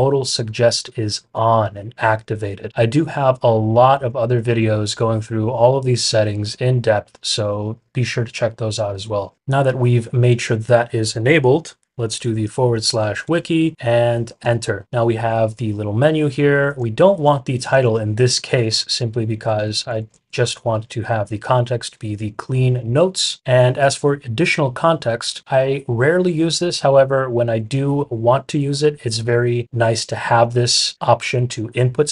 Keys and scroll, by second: 12.6-13.7 typing, 14.3 Return, 17.5 shift+fn+Page_Down, 17.8 shift+fn+Page_Down, 19.5 BackSpace, 20.1 fn+Down, 20.5 BackSpace.